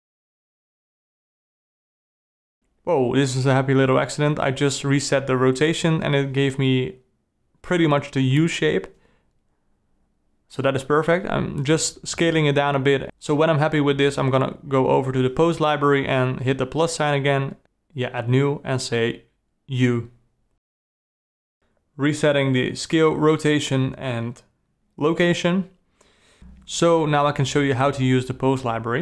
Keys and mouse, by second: 2.8 alt+r, 6.4 s, 12.8-16.4 drag, 17.4-19.3 drag, 21.6 alt+r, 22.3 a, 22.8 r, 23.8 alt+r, 24.2 alt+g, 24.7 alt+s, 28.2 click.